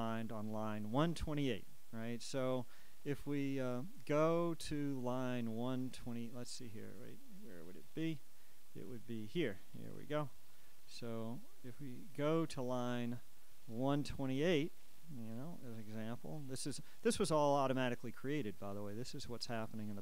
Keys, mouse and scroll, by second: 3.9 click, 7.5 click, 12.2-13.5 drag, 14.6-15.4 scroll down 2, 15.5 click, 16.1-17.8 scroll down 1, 18.0 scroll down 2, 18.7 click, 19.2-19.9 scroll down 2.